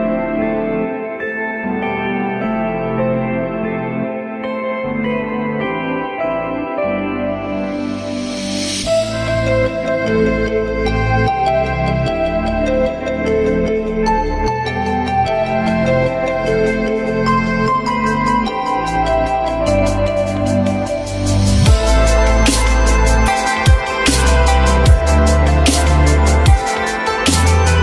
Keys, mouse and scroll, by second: 0.2 alt+scroll up 1, 9.5 ctrl+z, 10.3 alt+middle click, 11.0 alt+middle click, 17.1 alt+F4, 18.0 alt+middle click, 26.7 shift+click.